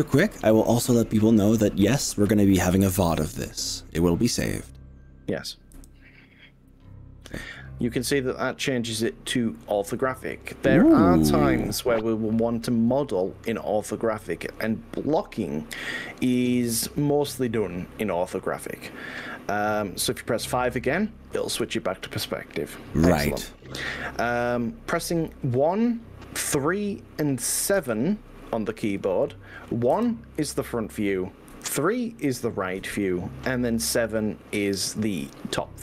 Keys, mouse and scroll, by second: 5.8 KP_5, 9.1-19.8 middle drag, 21.6 KP_5, 27.8 KP_1, 29.0 KP_3, 30.0 KP_7, 31.6 KP_1, 32.8 KP_3, 35.2 KP_7.